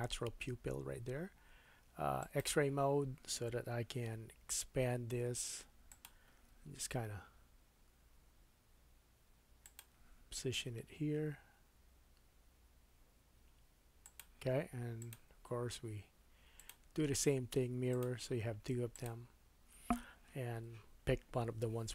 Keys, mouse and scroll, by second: 2.2-6.0 drag, 4.1 s, 6.0-15.0 middle drag, 6.5 g, 10.6 s, 15.0-18.0 drag, 18.0-21.9 middle drag.